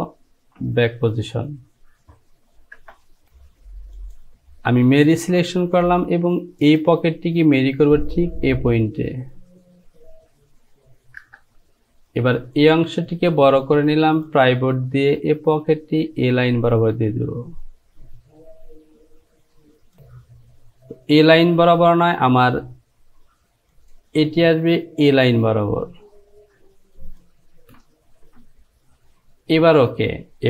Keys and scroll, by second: 2.9 Return, 11.3 Return.